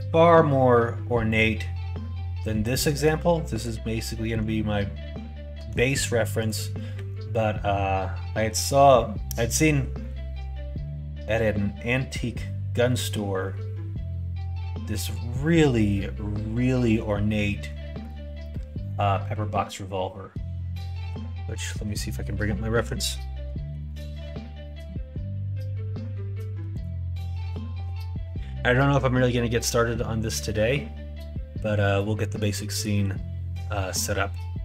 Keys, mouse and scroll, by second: 2.3 s, 5.5 s, 6.9 g.